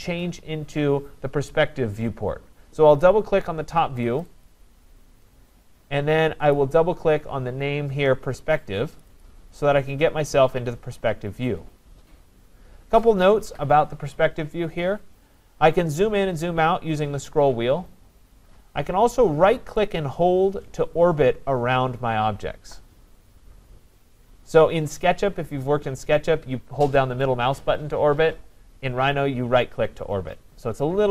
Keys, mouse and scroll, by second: 4.2 click, 4.5 click, 6.5 click, 9.0 click, 9.2 click, 9.8 scroll, 10.9-11.4 scroll, 11.4 scroll down 2, 12.8-13.3 scroll down 1, 13.3-14.2 scroll down 1, 16.0 scroll down 2, 16.1-16.9 scroll up 10, 17.2 scroll down 3, 17.3 scroll up 4, 17.8 scroll down 3, 17.9 scroll, 22.2 middle click, 22.2-22.5 scroll, 24.9 right click, 25.3-25.8 scroll down 3, 25.8 scroll up 3.